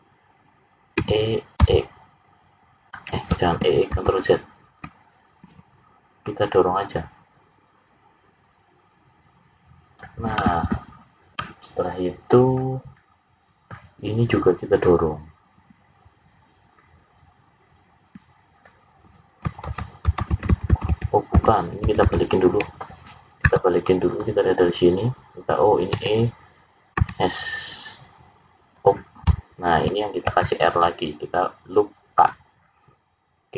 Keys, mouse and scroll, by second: 1.0 e, 3.9 ctrl+z, 7.0 click, 10.3 middle click, 10.9-11.4 scroll down 4, 11.3 middle click, 19.6 ctrl+z, 20.3-20.8 ctrl+z, 21.3 ctrl+z, 21.8 ctrl+z, 22.0 ctrl+z, 23.4 `, 25.9 e, 30.2 ctrl+r.